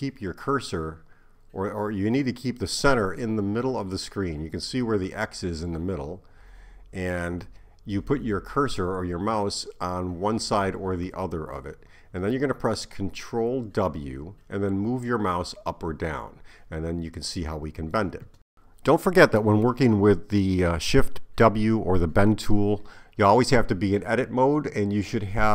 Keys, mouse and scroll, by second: 24.4 shift+w.